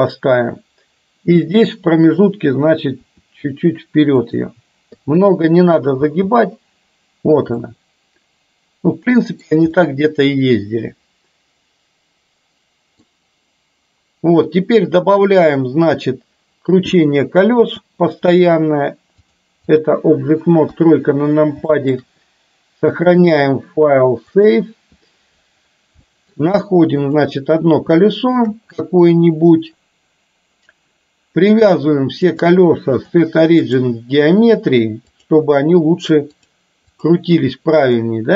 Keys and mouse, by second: 1.5 click, 3.1 r, 5.0 i, 6.0 space, 7.6-9.5 middle drag, 9.9-13.3 middle drag, 17.8 space, 19.3-19.9 drag, 20.8 KP_3, 21.8 shift+middle drag, 23.3-24.6 drag, 26.1 shift+middle click, 28.0 shift+middle click, 31.6 click, 32.4-33.9 drag, 35.4 click, 36.6-38.1 drag.